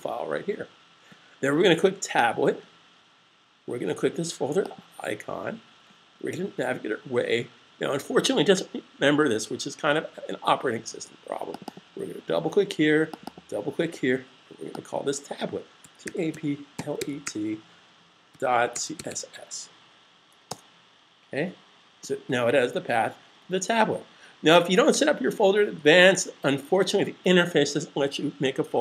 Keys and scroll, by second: 15.5-16.9 typing, 18.3-18.9 typing.